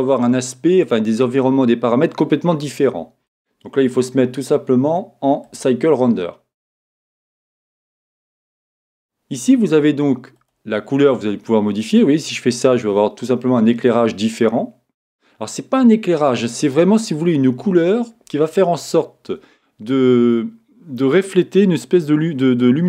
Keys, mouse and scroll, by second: 3.8-7.0 drag, 10.4-12.2 drag.